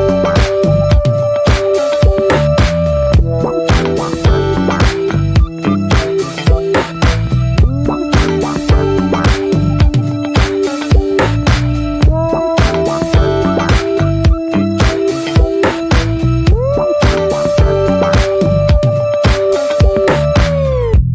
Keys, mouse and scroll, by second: 3.8 click, 4.1-4.4 scroll down 3, 4.4 scroll up 3, 4.6-5.6 scroll down 1, 5.6 scroll up 1, 5.8-7.3 shift+middle drag, 7.3 click, 8.2 ctrl+z, 11.2 click, 11.5 scroll down 1, 11.9 middle click, 12.5 scroll up 2, 12.8 ctrl+z, 14.5-16.4 shift+middle drag, 16.4 click, 16.6 scroll down 1, 16.8 middle click, 17.0 scroll up 1, 17.3 middle click, 17.5 scroll down 2, 17.6 middle click, 17.7-19.2 scroll up 1, 19.2 click.